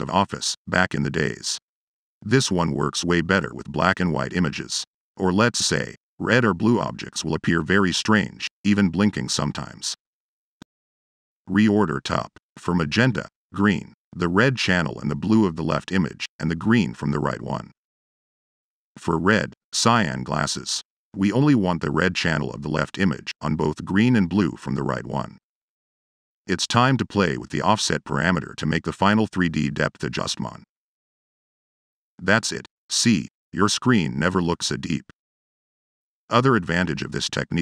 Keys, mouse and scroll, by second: 11.0 click, 11.1 Tab, 13.4 click, 13.8 click, 14.6 click, 15.9 click, 17.6 click, 18.1 click, 18.9 click, 19.1 ctrl+c, 19.4 ctrl+v, 19.9 click, 20.1 click, 20.8 click, 21.3 click, 21.9 click, 23.9 click, 25.0 middle click, 26.0-29.2 middle drag.